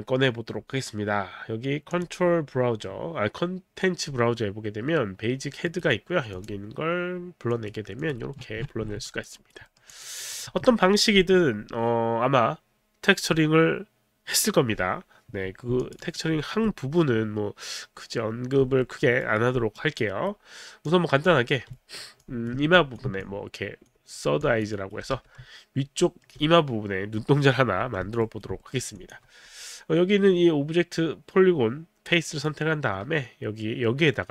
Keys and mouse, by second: 2.0 click, 5.7 right click, 6.3 click, 7.5 click, 8.0 click, 9.1 alt+click, 9.3 alt+right click, 10.2 alt+middle click, 10.3 click, 15.8 alt+click, 16.0 alt+right click, 16.5 alt+middle click, 18.8 alt+middle click, 19.3 alt+right click, 20.9 click, 21.9 alt+right click, 22.4 alt+click, 22.7 ctrl+click, 23.2 ctrl+click, 24.4 alt+click, 24.7 alt+right click, 25.3 alt+right click, 25.3 w, 26.1 alt+middle click, 28.4 alt+right click, 28.7 alt+middle click, 28.7 alt+right click, 29.1 alt+click, 32.5 right click.